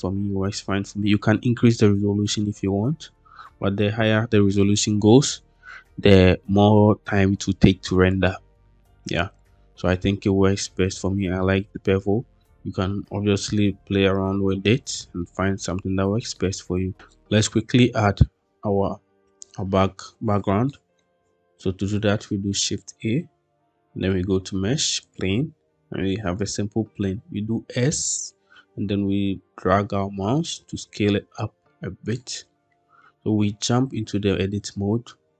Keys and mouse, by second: 9.3-9.9 middle drag, 15.1 shift+middle click, 16.2-16.9 middle drag, 20.6 middle click, 22.7 shift+a, 27.1 s, 31.9 click, 32.4 middle click, 33.6 Tab.